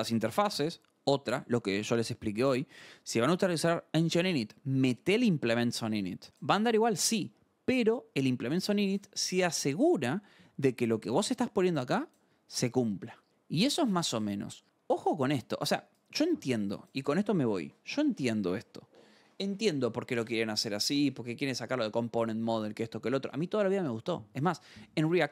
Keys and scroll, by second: 13.2 scroll.